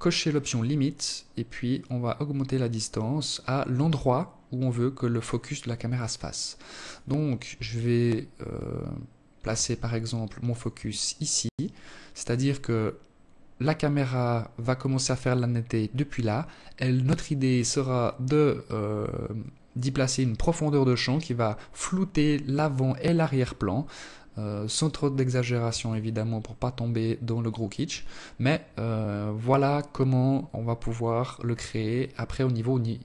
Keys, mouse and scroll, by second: 0.0 click, 5.1 click, 8.1 alt+click, 22.3-22.7 scroll down 3, 24.0 alt+click, 31.5 click.